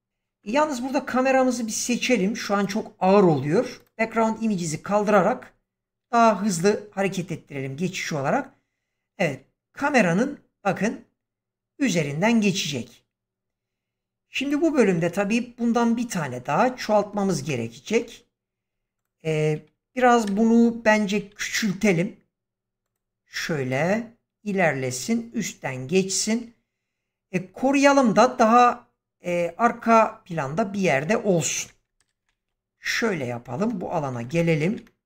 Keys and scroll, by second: 20.2 0, 21.1 s, 31.9 shift+Left.